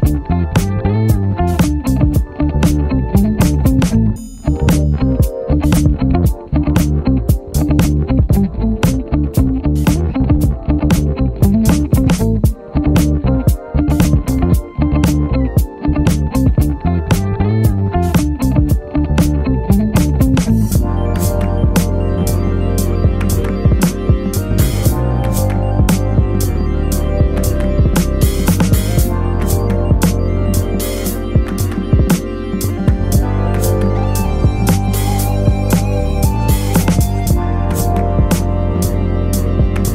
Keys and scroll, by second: 0.1 Down, 0.3 Return, 0.7 Down, 0.8 Return, 1.3 Down, 1.5 Return, 2.0 Down, 3.3 Return, 3.7 Down, 3.8 Return, 4.1 Down, 4.3 Return, 4.6 Down, 4.8 Return, 6.7 Down, 7.2 Return, 7.7 Down, 7.8 Return, 8.2 Down, 8.3 Return, 8.7 Down, 8.8 Return, 9.1 Down, 9.2 Return, 9.5 Down, 9.6 Return, 9.9 Down, 10.3 Return, 10.7 Down, 10.7 Return, 11.1 Down, 11.2 Return, 11.6 Down, 11.6 Return, 12.1 Down, 12.3 Return, 12.6 Down, 12.8 Return, 13.2 Down, 13.3 Return, 13.6 Down, 13.7 Return, 14.1 Down, 14.1 Return, 14.5 Down, 14.6 Return, 14.9 Up, 15.0 Return, 15.5 Up, 15.8 Return, 16.2 Up, 21.2 super+-, 22.9 b, 25.1 e, 26.9 e, 28.9-30.3 typing, 34.1 super+z, 34.7 alt+super+z, 35.3 alt+super+z.